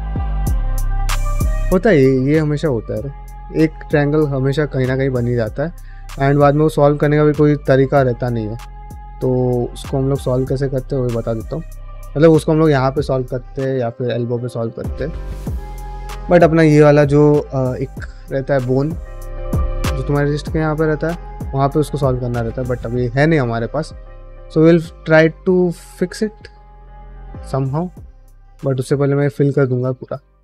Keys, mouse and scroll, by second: 7.8 ctrl+r, 8.9 right click, 9.7 middle click, 10.2 middle click, 10.6 shift+middle click, 10.9 middle click, 11.3 shift+middle click, 11.7 ctrl+middle click, 11.9 middle click, 22.2 middle click, 22.6 shift+middle click, 22.9 middle click, 24.0 click, 24.4 f, 25.5-29.9 typing, 25.7 click, 26.4 click, 26.9 click, 28.3 click, 29.5 click, 30.1 middle click.